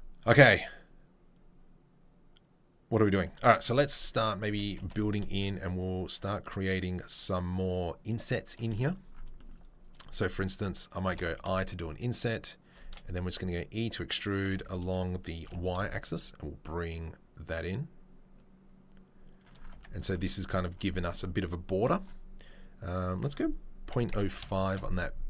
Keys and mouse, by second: 3.8 click, 4.8 middle click, 5.5 shift+click, 5.8-6.9 shift+middle drag, 6.9 shift+click, 7.7 shift+middle click, 8.5 shift+click, 8.6-19.9 middle drag, 12.8 e, 19.7 Tab, 19.9-20.7 drag, 20.7-21.9 middle drag, 21.9-25.2 drag.